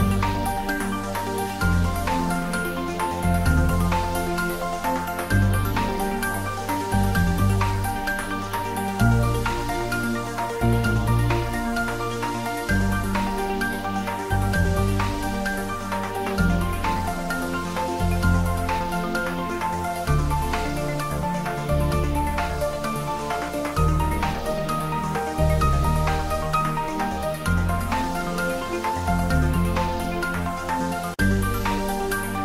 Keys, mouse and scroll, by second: 0.2 ctrl+middle click, 0.9 ctrl+s, 2.0 click, 2.4 shift+click, 3.9 middle click, 4.5-5.4 typing, 6.5 ctrl+z, 7.9 click, 8.9 shift+click, 10.3 ctrl+j, 11.4 ctrl+middle click, 11.9 shift+click, 13.2 click, 13.7 ctrl+middle click, 14.2 r, 16.1 click, 16.5 g, 17.2 click, 17.6 s, 18.1 click, 19.5 ctrl+middle click, 20.4-21.9 typing, 21.8 click, 23.4 g, 23.6 z, 25.3 Down, 26.2 click, 27.2 ctrl+s, 27.8 shift+z, 28.2 middle click, 29.2 shift+middle click, 29.9 h, 30.3 ctrl+z, 30.6 g, 32.0 click, 32.2 ctrl+s.